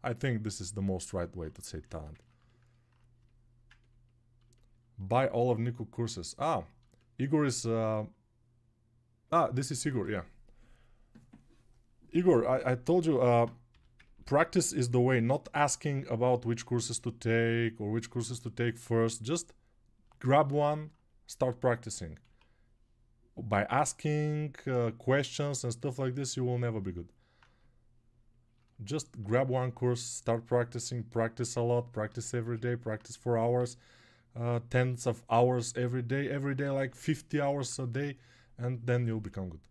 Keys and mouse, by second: 3.2 alt+click, 3.2 alt+middle click, 3.2 alt+right click.